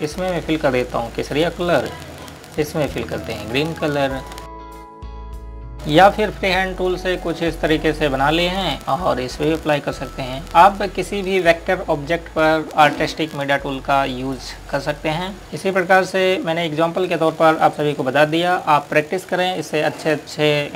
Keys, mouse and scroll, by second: 0.2 right click, 1.0 click, 5.7 scroll up 1, 7.5 click, 14.6 click, 15.4 scroll down 1, 15.6 click.